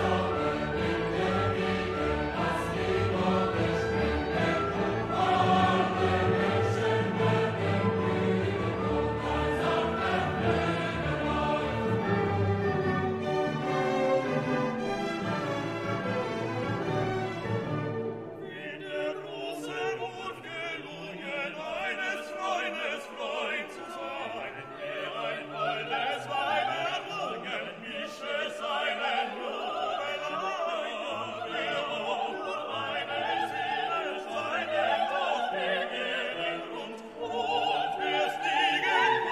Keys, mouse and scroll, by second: 0.5 click, 1.2 click, 2.4 click, 3.1 click, 4.5 click, 5.6 click, 6.6 ctrl+click, 7.0 ctrl+click, 7.5 ctrl+click, 9.1 ctrl+click, 11.0 click, 12.0-14.6 drag, 15.2 click, 16.4 space, 17.0 click, 17.3-18.2 drag, 19.1 click, 19.7 right click, 21.1 click, 22.8 click, 33.1 click, 33.9 click, 34.3 click, 34.8-37.3 drag, 37.6 click, 37.9 click.